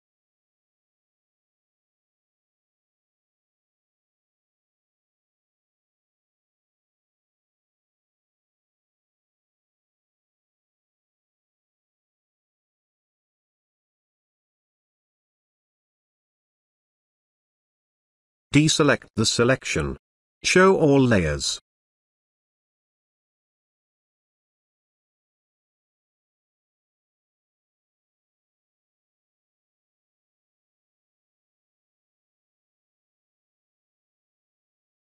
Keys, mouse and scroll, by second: 18.3 click, 20.9 alt+click, 22.0 space, 22.2-22.8 ctrl+click, 23.4-24.3 ctrl+drag, 23.8 click, 24.4-25.0 ctrl+click, 25.3-26.0 ctrl+drag, 29.9 click, 32.5 click.